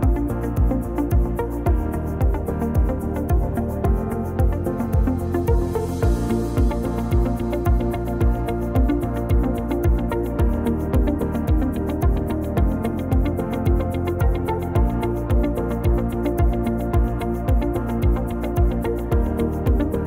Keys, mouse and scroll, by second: 3.1 ctrl+z, 3.6 middle click, 4.1 click, 6.1 click, 6.5 click, 7.2 shift+click, 7.7 shift+click, 8.6 shift+click, 10.0 click, 12.1 ctrl+b.